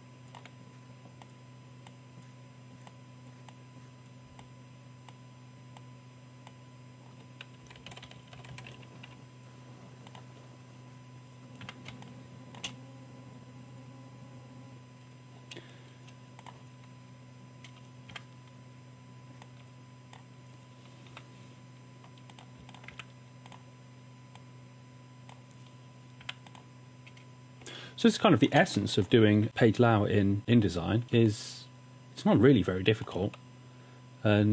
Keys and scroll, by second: 7.7 Down, 7.8 Down, 7.9 Right, 8.0 Right, 8.1 Right, 8.3 Right, 8.4 Down, 8.5 Down, 8.6 Down, 9.1 Left, 11.7 w, 11.9 space, 18.1 w, 21.3 i, 22.9 v, 26.3 w, 27.6 space, 28.7 space, 30.4 typing, 31.9 typing, 33.3 Tab.